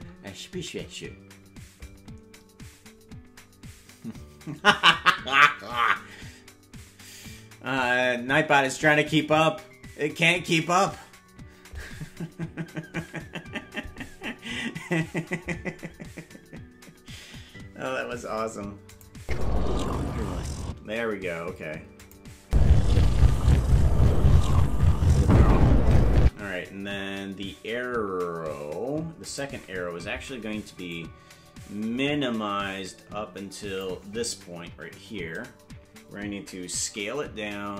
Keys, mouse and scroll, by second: 18.9 click, 19.2 space, 20.7 space, 22.0 click, 22.4 space, 26.3 space, 29.2 click, 30.9-33.9 drag, 34.8 Left, 36.8 s.